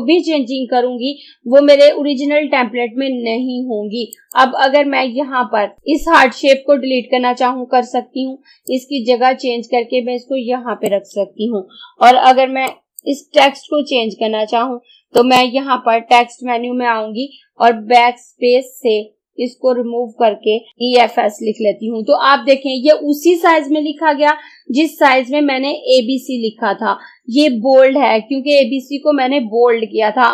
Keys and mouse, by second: 4.2 click, 8.7-17.5 drag, 18.4 BackSpace, 20.5-21.2 typing, 23.2 typing.